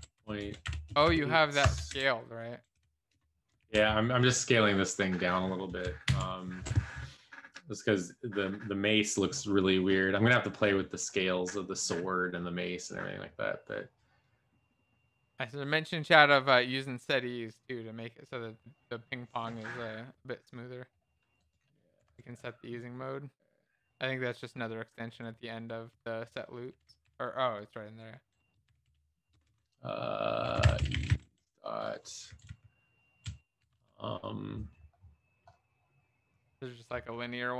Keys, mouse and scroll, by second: 25.5 Right, 25.5 End, 25.7 Return, 26.3-27.7 typing, 32.9 Down, 33.0 Down.